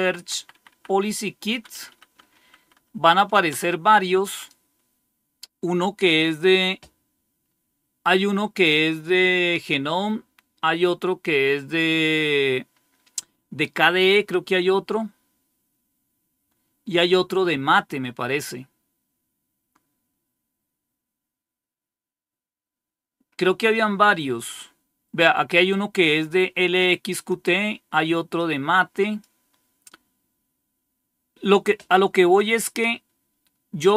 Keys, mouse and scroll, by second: 0.1 Left, 0.3 Left, 0.5 Left, 0.6 Left, 1.6 Delete, 1.8 Delete, 2.0 Delete, 2.2 Delete, 2.3 Delete, 2.5 Delete, 2.7 Delete, 2.8 Delete, 3.4 Return, 7.4 scroll up 1, 8.2-11.3 scroll up 1, 11.3-12.4 scroll up 1, 12.4-13.2 scroll up 1, 13.2-13.9 scroll up 1, 13.9-14.6 scroll up 1, 14.6-15.9 scroll up 1, 15.9-17.0 scroll up 1, 17.3-18.0 scroll up 1, 18.1-19.2 scroll up 1, 19.5-20.2 scroll up 1, 21.3-22.8 scroll up 1, 22.8-24.2 scroll down 2, 24.2-25.1 scroll down 1, 26.2 click, 28.3 click, 30.9 scroll down 1.